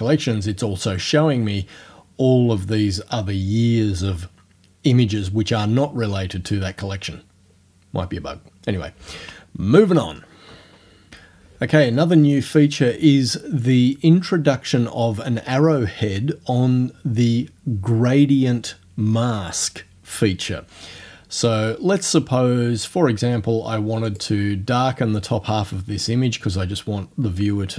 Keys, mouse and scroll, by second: 24.1 click.